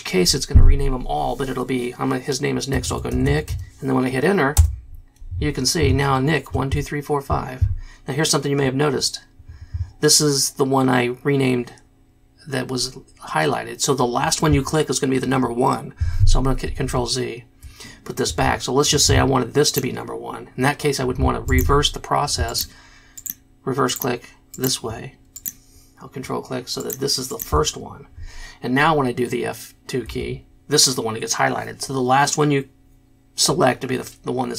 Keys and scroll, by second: 2.7-3.9 typing, 4.5 Return, 16.9 ctrl+z, 30.3 F2.